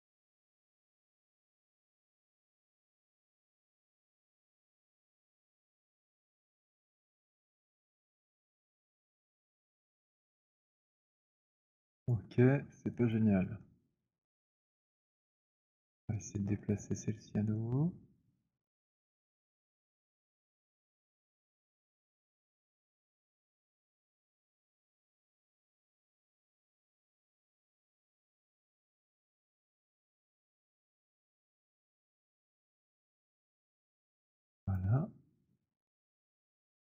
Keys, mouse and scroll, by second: 2.4 click, 6.5 click, 8.5 click, 12.2 alt+click, 12.6 middle click, 13.1 alt+click, 13.7 alt+middle click, 14.0 alt+middle click, 14.7 alt+click, 15.7 click, 20.9 alt+click, 21.9 alt+middle click, 23.4 right click, 24.3 click, 28.1 click, 29.0-33.6 typing, 31.4 middle click, 33.4 middle click, 34.9 click.